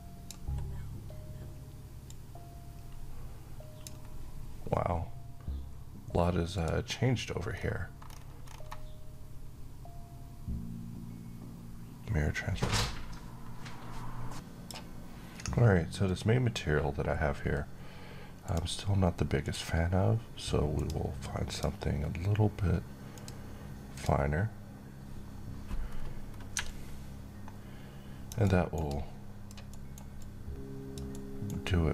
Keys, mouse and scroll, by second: 7.2-7.7 scroll down 1, 7.7-10.0 scroll up 1, 14.6 click, 17.4-18.3 scroll down 1, 18.3 click, 25.8-26.5 scroll up 1, 26.5-28.6 drag, 28.3 alt+right click, 28.7-29.4 alt+click, 29.6 alt+right click, 30.1-31.0 alt+click, 31.0-31.9 alt+right click, 31.5-31.9 alt+drag.